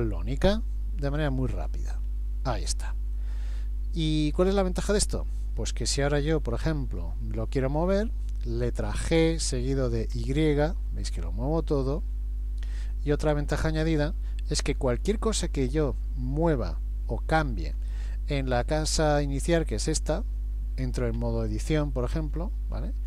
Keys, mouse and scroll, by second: 1.2 click, 9.0 g, 14.2 shift+middle click, 15.5 click, 21.2 Tab, 22.3-22.6 scroll up 2, 22.9 middle click.